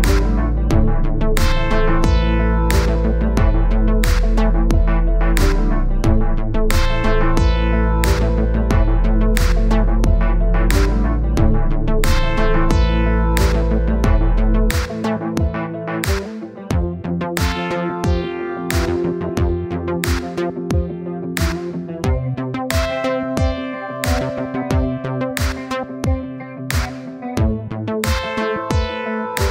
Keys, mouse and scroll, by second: 0.7-1.9 scroll up 1, 2.0 middle click, 2.5 click, 2.8-4.0 scroll up 1, 4.1 scroll down 2, 4.3 middle click, 4.9 scroll up 1, 5.1-7.7 middle drag, 7.7-10.1 drag, 10.4-11.5 middle drag, 11.5-18.8 drag, 18.8 middle click, 19.0-25.5 drag, 26.4-27.6 middle drag, 28.0-29.4 middle drag, 29.4 click.